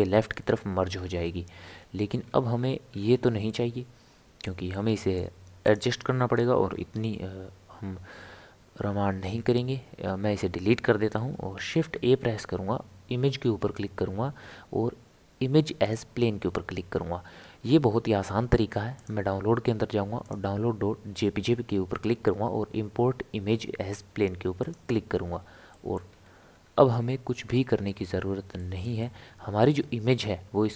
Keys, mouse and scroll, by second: 0.9-1.6 scroll up 4, 1.6 scroll down 1, 1.6 scroll up 1, 1.6 scroll down 2, 1.7-2.2 scroll up 1, 2.2-2.9 scroll down 7, 2.9 scroll up 2, 3.1 scroll down 1, 3.5-5.6 middle drag, 5.6 click, 10.1 Delete, 11.1-11.8 scroll up 1, 11.8 shift+a, 25.7-26.2 middle drag, 26.2 scroll up 1, 26.4 scroll down 1, 26.5-26.8 scroll up 4, 26.8-27.3 scroll down 1, 27.3 scroll up 1, 27.4-27.7 scroll down 1, 27.7 scroll up 1, 27.9 scroll down 1, 28.0-28.6 scroll up 1, 28.6-30.7 shift+middle drag.